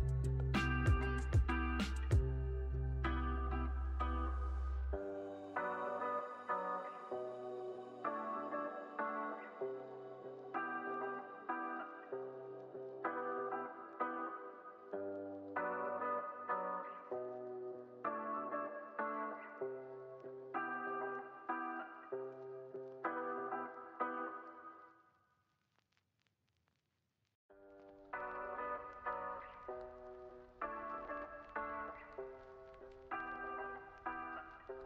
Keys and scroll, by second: 13.0 u, 20.1 super+c, 20.5 super+v, 25.6 super+s.